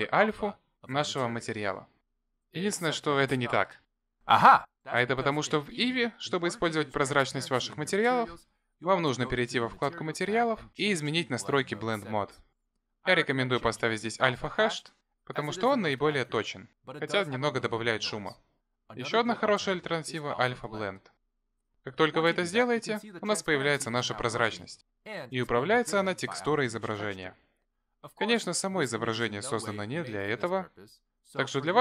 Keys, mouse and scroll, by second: 9.9 click, 11.0-12.9 scroll down 31, 13.9 click, 19.3 click, 23.4-24.1 scroll up 6, 24.3 shift+middle click, 25.5 middle click, 28.7 middle click, 30.7 middle click.